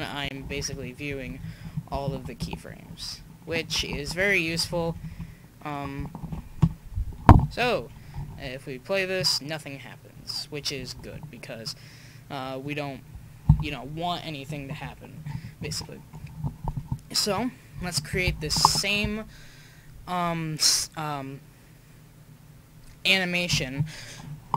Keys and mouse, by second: 0.0 Left, 0.4 alt+i, 1.1 Left, 1.3 Left, 1.5 Left, 1.6 Left, 2.1 alt+i, 2.9 Left, 3.1 Left, 3.5 Right, 3.9 alt+i, 4.5-4.9 Left, 5.0 Left, 5.2 Left, 6.2 alt+i, 8.3 alt+a, 11.3 alt+a, 11.7 drag, 15.6 KP_1, 17.3 KP_5.